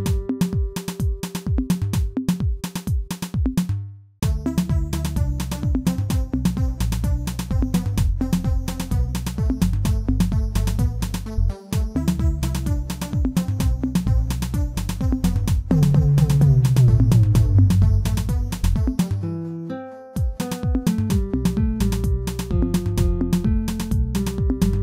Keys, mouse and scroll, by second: 2.9-5.9 drag, 5.9-6.8 middle drag, 6.8 scroll up 2, 7.1-7.8 middle drag, 7.8-8.4 scroll up 2, 8.4 Tab, 8.6-9.0 scroll up 2, 9.0 middle click, 9.7 Tab, 11.7-16.2 drag, 17.1-18.5 drag, 18.5-19.0 middle drag, 19.0-19.6 scroll down 2, 19.6 Tab, 19.9 a, 20.7 m.